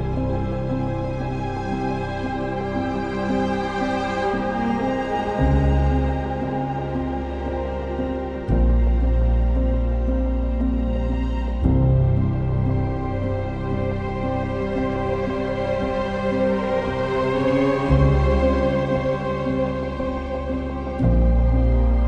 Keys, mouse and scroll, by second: 0.0-1.7 typing, 2.9-4.3 typing, 2.9 ctrl+z, 5.0 ctrl+z, 6.5 ctrl+z, 7.8 ctrl+z, 8.5 ctrl+z, 11.8 ctrl+z, 15.5 ctrl+z.